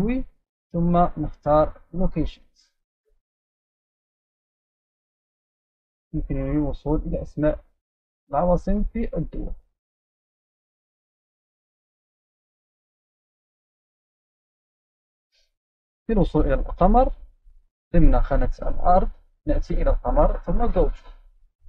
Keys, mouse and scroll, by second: 0.0 click, 2.0 click, 3.2-3.8 scroll up 3, 4.5-5.4 scroll up 2, 4.9 click, 6.2 click, 7.9-9.0 scroll down 2, 9.0 click, 9.8-10.4 scroll down 2, 11.1 click, 12.2 click, 13.3-14.5 right drag, 15.1-16.4 scroll down 2, 17.3 click, 20.4 click, 20.7 click.